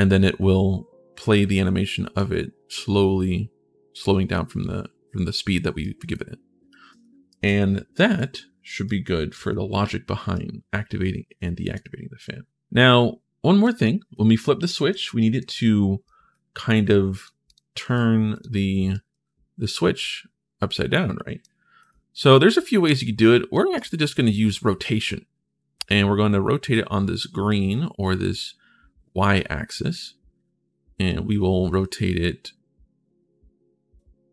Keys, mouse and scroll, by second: 1.7 right click, 5.6 right click, 7.0 right click, 7.7 right click, 8.6 right click, 10.1-11.5 right drag, 12.7 right click, 13.6 right click, 14.4 right click, 14.9 right click, 15.8 right click, 16.9 click, 17.2 click, 17.6 ctrl+shift+s, 18.1 click, 18.7-21.2 right drag, 18.9 w, 21.6 click, 29.7 click.